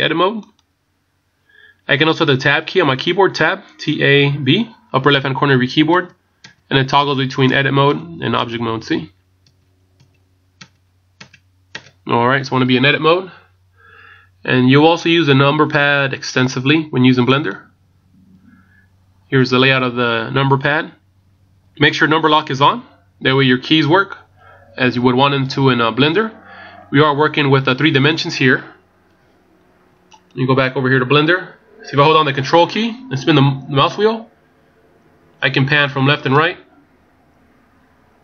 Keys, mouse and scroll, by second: 6.0 Tab, 6.5-10.6 Tab, 30.2 right click, 31.1-32.0 ctrl+scroll down 4, 33.0 ctrl+scroll up 1, 33.7 ctrl+scroll up 5, 34.5 ctrl+scroll down 1, 34.6-35.2 ctrl+scroll down 8, 35.7 ctrl+scroll up 1, 36.5 ctrl+scroll down 1, 36.6 ctrl+scroll down 2, 37.3 ctrl+scroll down 4, 37.7 ctrl+scroll up 1, 38.1 ctrl+scroll down 1.